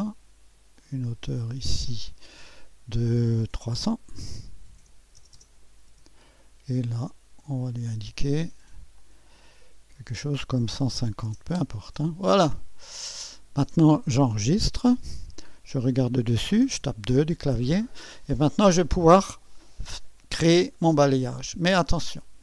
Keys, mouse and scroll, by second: 0.7-1.8 drag, 1.6 typing, 1.9-2.9 drag, 4.7-5.3 typing, 5.9 Return, 7.5 click, 8.0 typing, 8.9 click, 10.5-11.7 typing, 13.0-14.4 drag, 13.2 typing, 14.7 ctrl+s, 15.3-16.1 ctrl+scroll down 1, 16.8 2, 17.5-18.6 scroll down 1, 18.6-19.7 scroll down 1, 19.1 middle click, 19.5-20.2 typing, 19.7 click.